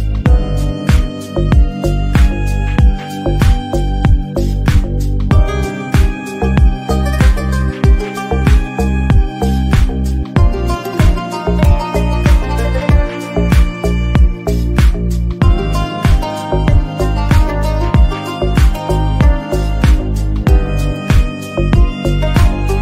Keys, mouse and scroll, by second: 0.2 shift+r, 0.4 Tab, 1.1 shift+middle click, 1.2 scroll down 1, 1.4 click, 1.8 KP_3, 1.9-2.3 scroll up 2, 2.8 ctrl+right click, 3.4 ctrl+right click, 3.8 middle click, 4.2 scroll down 2, 4.3-5.4 middle drag, 5.4 ctrl+r, 5.9 middle click, 6.9 ctrl+z, 7.0 middle click, 7.3 ctrl+r, 7.9 KP_1, 8.1-8.4 scroll up 1, 8.4 click, 8.7 middle click, 8.8 KP_1, 9.0 shift+middle click, 9.2 ctrl+r, 9.6 click, 9.9 3, 10.8 Delete, 11.1 1, 11.2 click, 11.4 g, 13.8 middle click, 14.3-17.4 typing, 14.7 click, 18.1-18.6 scroll down 1, 18.6 alt+z, 18.7 3, 18.9 click, 19.4 click, 20.1 shift+click, 20.8 Delete.